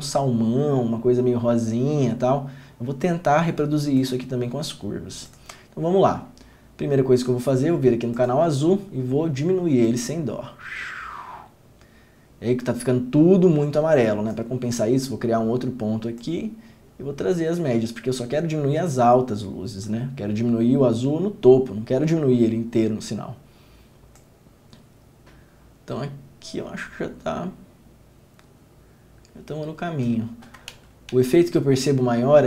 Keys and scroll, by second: 30.9 ctrl+d, 31.3 ctrl+d.